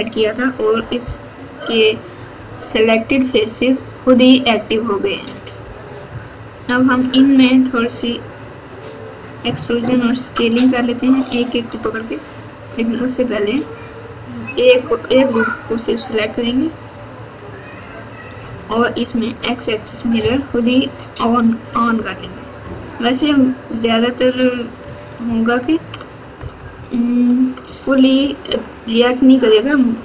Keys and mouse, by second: 17.2 alt+click, 19.9 click, 21.9 KP_6, 22.2 KP_6, 22.6-23.4 KP_6, 25.2 KP_6, 25.7 ctrl+KP_6, 25.8 ctrl+KP_6, 25.9 ctrl+KP_6, 26.4 KP_Add, 26.5 KP_Add, 26.7-27.4 KP_Add, 28.1-29.8 ctrl+KP_6.